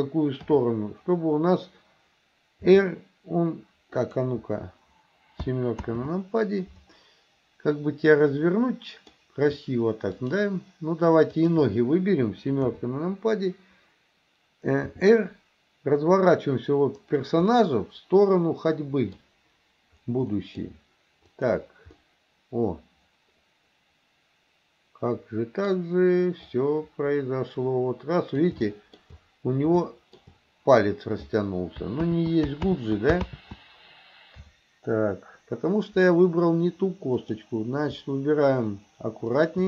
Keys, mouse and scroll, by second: 0.5 KP_7, 2.7 r, 5.9 ctrl+z, 8.4-9.2 middle drag, 10.2 shift+click, 11.4 shift+click, 12.7 KP_7, 14.9 r, 17.5-19.3 middle drag, 20.3 middle drag, 21.4 click, 22.0-25.8 middle drag, 26.6-28.5 drag, 28.8 shift+middle drag, 29.8-30.2 shift+middle drag, 32.2 ctrl+z, 32.8 ctrl+z, 37.2 click, 39.3 shift+click.